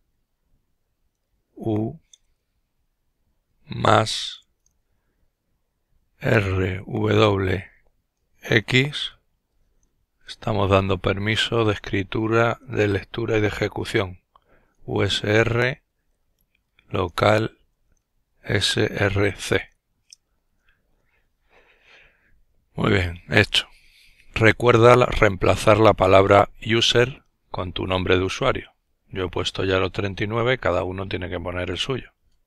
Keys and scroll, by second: 1.7 typing, 3.9 typing, 5.6-6.5 typing, 8.0 typing, 9.8 typing, 12.0-12.9 typing, 13.9-18.8 typing, 19.6 Return, 20.4 typing.